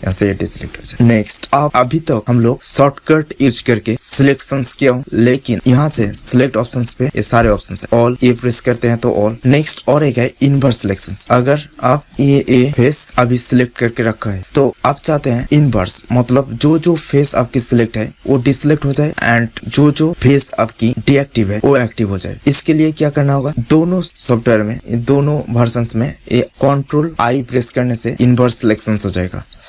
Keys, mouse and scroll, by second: 1.2 right click, 5.8-9.5 drag, 10.5-13.0 drag, 27.2 ctrl+i.